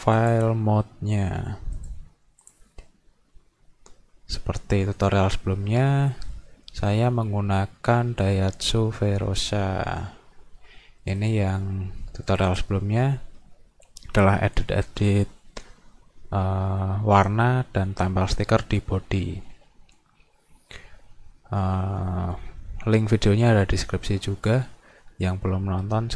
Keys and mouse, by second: 0.2 click, 1.8 click, 2.5 click, 5.0 click, 11.1 click, 12.3 click, 12.5 click.